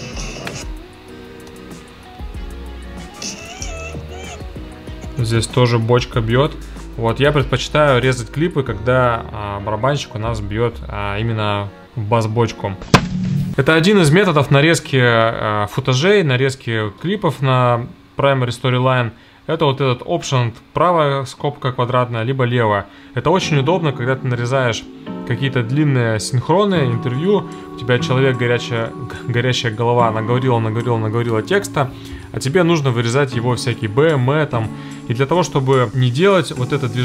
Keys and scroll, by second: 1.5 alt+], 1.9 alt+], 3.1 space, 4.9 Left.